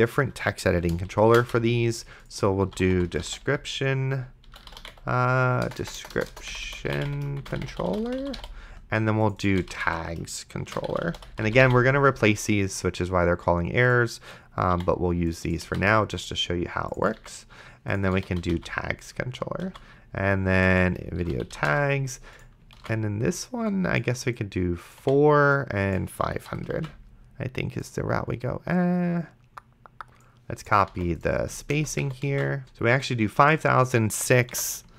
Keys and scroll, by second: 1.4 alt+shift+Down, 2.4-12.4 typing, 14.7 i, 15.9 ctrl+c, 17.5 ctrl+v, 17.9-19.0 typing, 19.9 ctrl+s, 21.2-22.2 typing, 23.0 ctrl+s, 25.0 4, 26.5 5, 31.2 ctrl+c, 31.7 Return, 32.3 ctrl+v, 32.6 ctrl+s, 34.8 6.